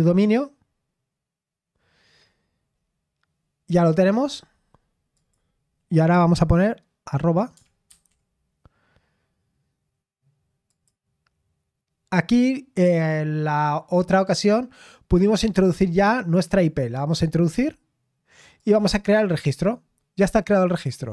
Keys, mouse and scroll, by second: 2.2-3.5 scroll down 1, 5.1 click, 7.8 @, 10.7-12.6 drag, 16.4-18.4 drag, 18.6-21.1 drag.